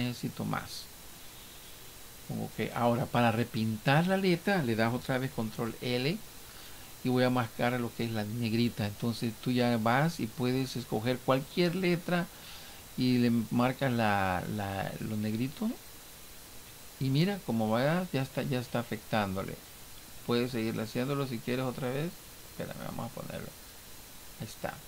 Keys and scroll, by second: 5.3 ctrl+l.